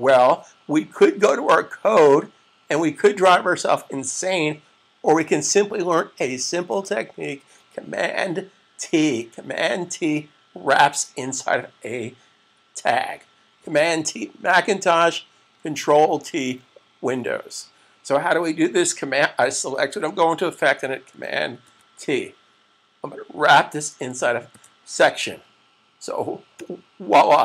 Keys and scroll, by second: 21.4 super+t, 24.3 super+v.